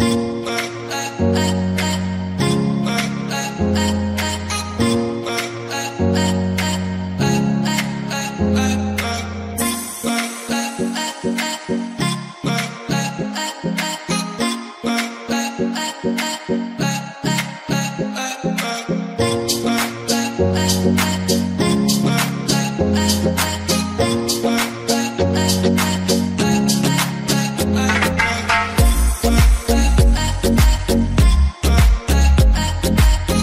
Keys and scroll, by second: 28.9 Return, 29.5-30.5 typing.